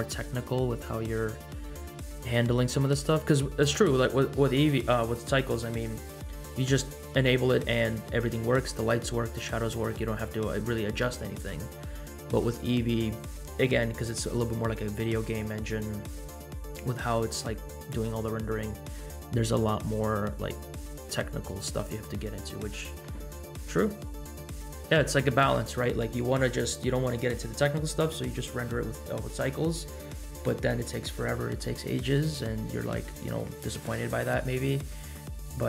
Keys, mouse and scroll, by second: 34.7-35.1 middle drag.